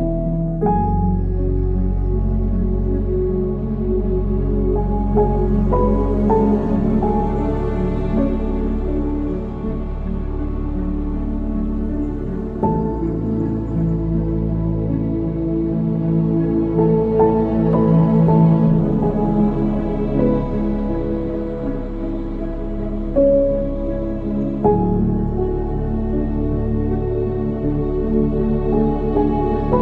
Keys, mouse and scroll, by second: 3.3-6.4 middle drag, 7.5 g, 10.7 KP_1, 12.5 g, 16.4 shift+a, 18.2 s, 19.8-21.2 middle drag, 21.2-21.6 scroll down 2, 21.6-24.6 middle drag, 24.7-25.5 scroll up 3, 25.5-28.5 middle drag, 29.7 click.